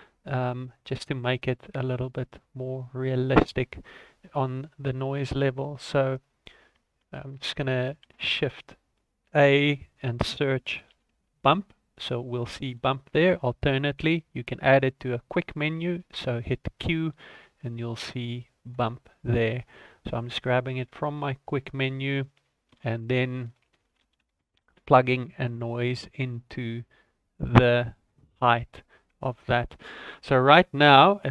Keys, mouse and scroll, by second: 1.4-2.0 scroll down 7, 2.0 middle click, 2.5 middle click, 2.9-4.3 scroll up 2, 4.3 middle click, 4.3-4.8 scroll up 1, 4.8-5.3 scroll up 1, 5.3 scroll down 1, 5.5 middle click, 6.2 click, 8.0 shift+a, 13.2-16.1 scroll up 1, 16.8 q, 19.6-20.2 scroll up 4, 20.6 click, 21.4 scroll down 2, 21.6 middle click, 22.1 click, 22.6 shift+a, 25.9-26.4 scroll up 2, 26.7 click, 27.8 click, 28.4 middle click, 28.7 scroll down 3, 29.0 middle click, 29.5 middle click, 30.5 ctrl+a.